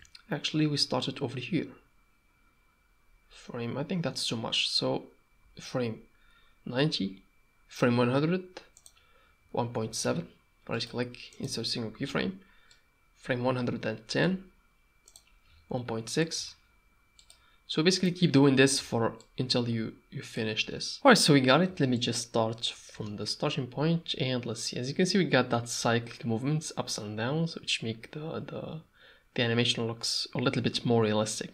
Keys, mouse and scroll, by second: 8.8-10.7 drag, 10.7 middle click, 12.7-14.2 shift+drag, 15.1-17.4 drag, 17.4 middle click, 19.2-20.4 shift+drag, 21.9 shift+click, 22.9 space.